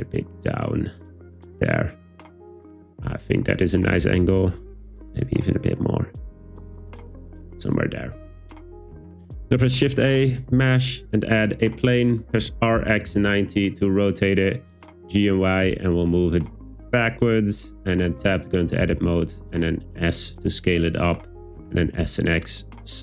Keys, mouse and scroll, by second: 1.0 click, 4.1 r, 4.3 r, 7.4 click, 9.6 shift+a, 12.4 r, 12.8 x, 13.1 9, 13.2 0, 13.3 Return, 14.7 g, 15.0 y, 17.5 click, 18.2 Tab, 18.7 a, 19.0 s, 21.1 click, 21.6 s, 21.9 x.